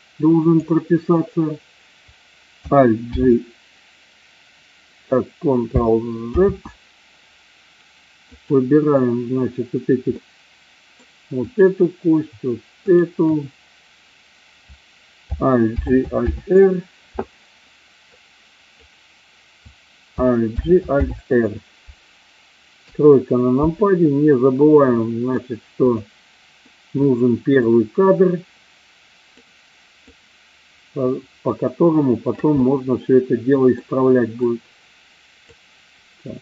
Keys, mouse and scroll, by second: 3.0 alt+g, 6.2 ctrl+z, 8.3 click, 10.0-11.0 middle drag, 15.6 alt+g, 16.2 alt+r, 18.2-18.8 drag, 20.5 alt+g, 20.9 alt+r, 22.8 KP_3, 24.9-25.3 middle drag, 25.9 click, 26.5-27.0 middle drag, 27.6-29.4 drag, 30.1-32.4 drag, 32.5-33.6 middle drag, 34.4-35.5 drag.